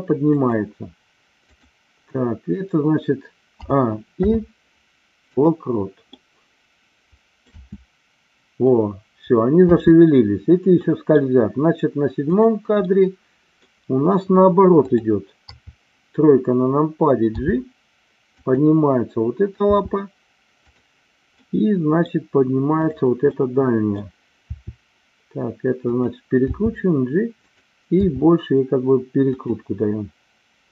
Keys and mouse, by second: 0.3 click, 3.4 a, 4.0 i, 6.2-7.6 middle drag, 7.6 space, 10.8 middle click, 10.8 space, 12.3 click, 12.9 middle click, 15.4 KP_3, 17.3 g, 18.4 click, 19.7 r, 20.7 click, 21.3 middle click, 22.7 click, 23.3 middle click, 24.4 r, 25.8 click, 26.4 g, 27.4 click, 27.9 r.